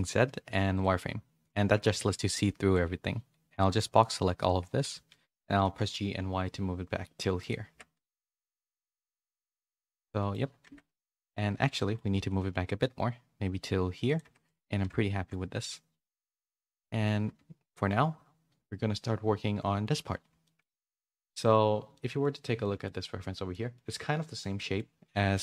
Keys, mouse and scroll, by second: 1.7 a, 1.9 a, 2.3 b, 5.1 shift+middle click, 5.2 shift+middle click, 7.7 Tab, 8.0 z, 8.3 a, 8.5 a, 8.7 middle click, 10.6 Tab, 11.1 KP_3, 11.7 shift+middle click, 12.1 g, 14.2 Tab, 14.5 a, 14.7 a, 15.0 shift+middle click, 16.1 click, 17.3 KP_3, 22.0 middle click, 22.6 middle click, 23.6 middle click, 24.5 middle click.